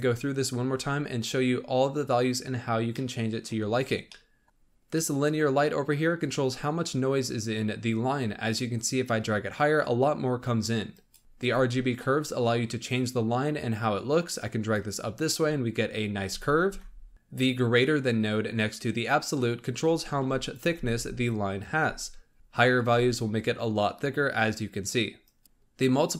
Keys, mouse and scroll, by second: 0.0-1.7 drag, 1.7-3.5 middle drag, 1.7-3.1 scroll down 1, 3.5 scroll up 3, 4.4 scroll down 2, 6.2-9.2 drag, 11.2 ctrl+z, 14.7-16.6 drag, 16.6 ctrl+z, 19.2-20.4 middle drag, 20.4 ctrl+shift+click, 22.7-25.4 drag.